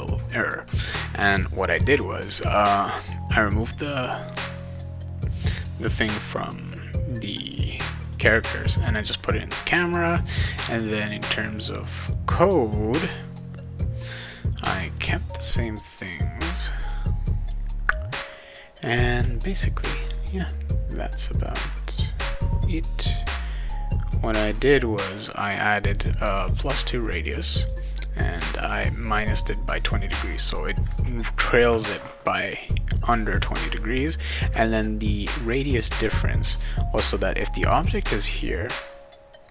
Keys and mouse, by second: 1.2 click, 2.5 click, 3.7 click, 5.3 click, 7.4 click, 7.7 click, 8.0 click, 8.7 click, 11.1 click, 14.9 click, 16.8 click, 24.1 click, 24.6 click, 25.3-26.6 drag, 27.3 click, 28.3 click, 28.4 click, 28.6 click, 29.2 click, 29.4 click.